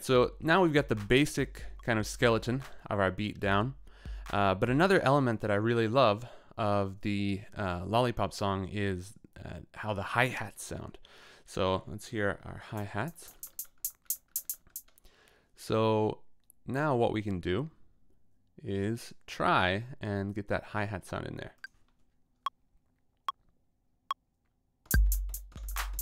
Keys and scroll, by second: 4.8 space, 12.7 t, 24.9 t.